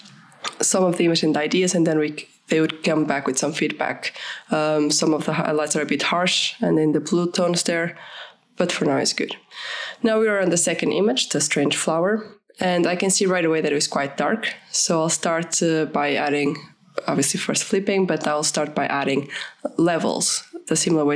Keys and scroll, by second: 5.1 ctrl+-, 5.7 ctrl+-, 19.8 ctrl+-.